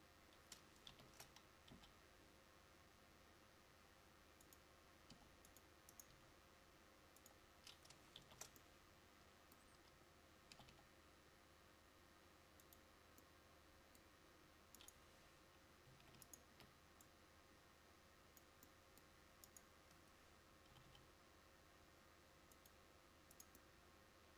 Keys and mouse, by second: 1.0 ctrl+z, 1.8 g, 5.2 g, 8.3 ctrl+z, 10.6 g, 18.5-20.9 drag, 20.9 g.